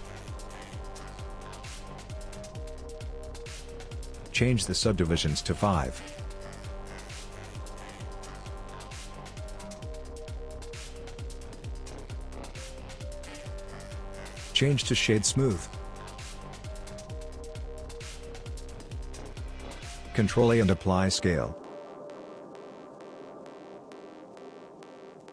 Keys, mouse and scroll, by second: 4.6 click, 5.1 click, 5.7 click, 7.3 click, 10.4 click, 11.0 middle click, 13.2 Tab, 13.9 right click, 15.9 right click, 19.4 ctrl+a, 21.6 click, 22.3 scroll down 4, 22.6 middle click, 24.3 scroll up 2, 25.1-25.3 scroll up 2.